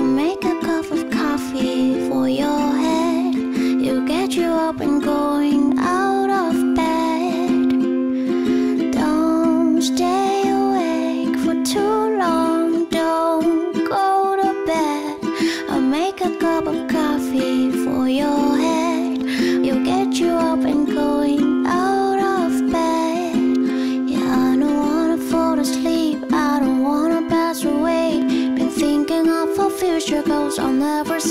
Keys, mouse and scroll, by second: 0.0-1.5 typing, 10.7-12.5 typing, 15.3 p, 16.6 5, 16.7 Tab, 16.8 5, 17.2 Return, 21.3-22.4 typing, 24.4-25.2 typing, 29.6-31.0 typing.